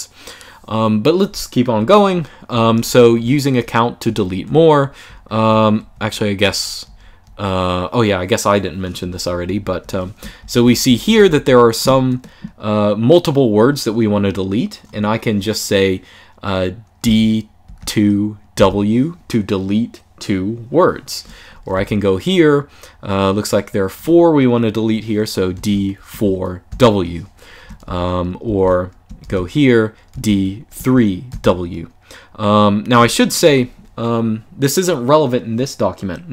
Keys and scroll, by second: 1.5-7.5 typing, 8.7-11.4 typing, 16.8 d, 17.4 2, 18.3 w, 21.5 shift+w, 25.3 d, 25.8 4, 26.4 w, 27.6-31.0 typing.